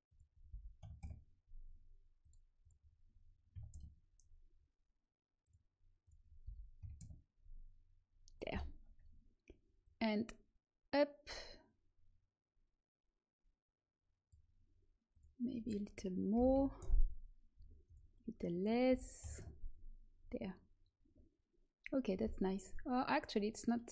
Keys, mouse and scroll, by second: 9.8-13.5 drag, 15.1-16.7 drag, 17.8-22.8 drag, 22.8-23.9 middle drag.